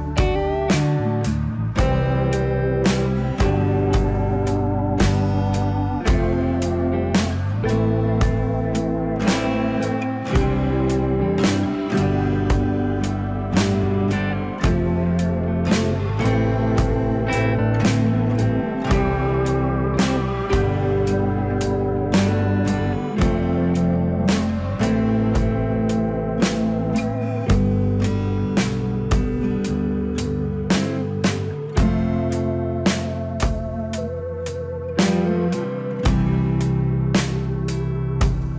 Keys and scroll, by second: 29.6 F4.